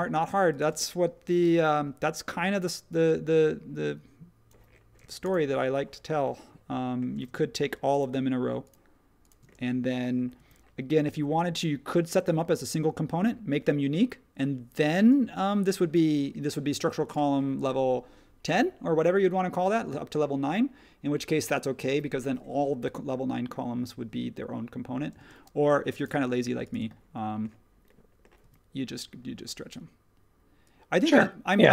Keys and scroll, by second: 1.5 s, 5.0 space, 7.1 space, 10.3 s, 17.6 space, 25.1 space, 28.4 s.